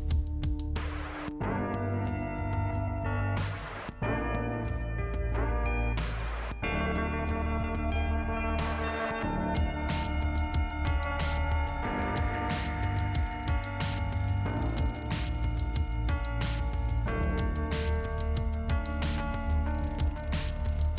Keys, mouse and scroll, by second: 3.0 click, 7.8 alt+k, 8.5 middle click, 9.5 click, 11.4 click, 13.9 click, 17.2 middle click, 17.9 click, 19.5 click.